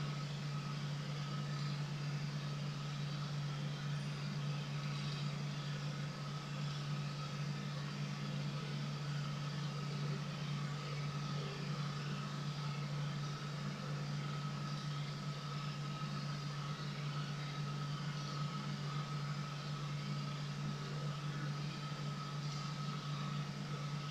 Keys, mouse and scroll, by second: 1.4 click, 1.5 click, 4.7 click, 4.8 click, 5.0 click, 5.8 scroll down 1, 6.6 click, 9.9-11.2 scroll down 1, 14.5 click, 14.7 click, 18.0 click, 18.2 click, 22.4 click.